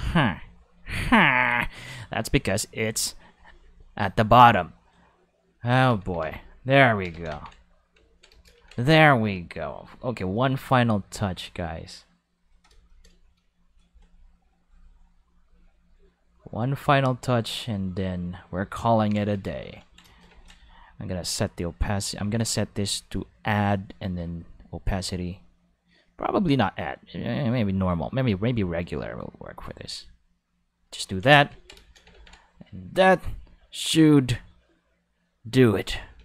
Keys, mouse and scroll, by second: 1.2-1.9 drag, 3.3 click, 3.6 click, 3.8 click, 4.0 click, 4.4 click, 5.7 Tab, 6.0 a, 6.2 x, 6.3 click, 7.0 5, 7.3 Tab, 8.0 ctrl+middle click, 9.8-12.4 drag, 14.6 click, 15.9-18.4 drag, 18.8 ctrl+middle click, 19.5 ctrl+shift+middle click, 21.3-22.4 drag, 22.6 click, 23.3 click, 24.1-26.0 drag, 26.3 click, 28.4 click, 29.0-30.7 drag, 29.2 5, 31.2 ctrl+5, 32.7 click, 33.8-35.7 drag, 36.1 ctrl+5.